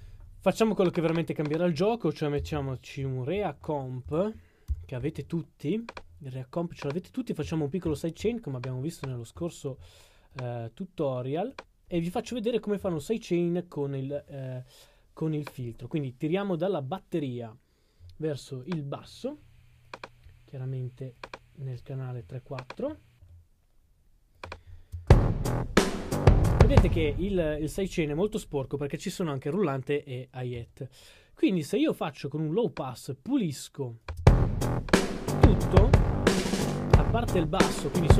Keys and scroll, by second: 2.1-5.3 typing, 6.7 c.